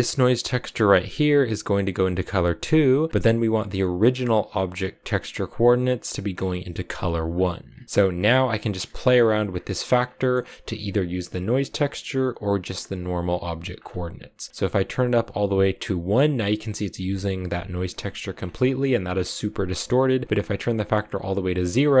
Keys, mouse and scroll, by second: 0.9 click, 4.3 click, 7.5 click, 7.9 click, 8.3-9.3 scroll up 4, 8.4 middle click, 9.3-10.0 scroll down 5, 10.0-11.3 middle drag, 11.3 click, 13.5-14.5 scroll up 5, 14.5-16.9 drag, 16.9-17.6 scroll down 3, 17.6 click, 18.2-19.0 scroll down 3, 19.0-20.2 scroll up 3, 20.2-22.0 drag.